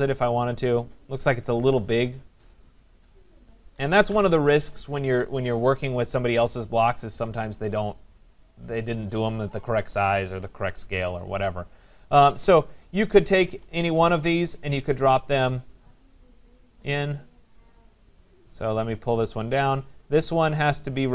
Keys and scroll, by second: 4.1 Delete.